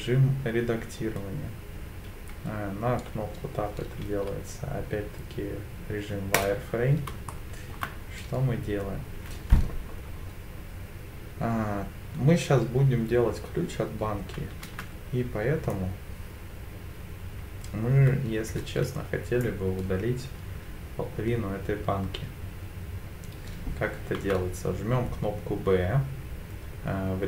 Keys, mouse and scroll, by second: 4.2 z, 7.3 shift+middle click, 14.6 b, 24.2 b.